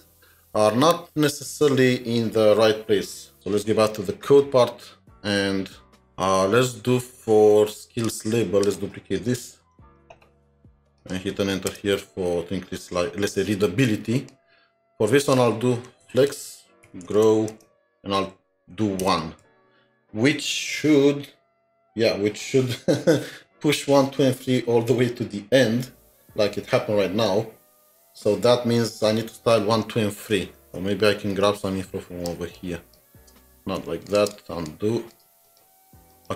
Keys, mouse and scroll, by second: 9.4 alt+t, 9.5 alt+s, 9.6 alt+shift+Down, 11.7 Return, 12.6 scroll down 2, 16.3-17.7 typing, 19.4 ctrl+s, 30.6 alt+Tab, 32.3-33.3 space, 33.6 ctrl+z, 34.3 space, 34.7 double click, 34.8-35.2 space, 35.3 space, 36.1 double click.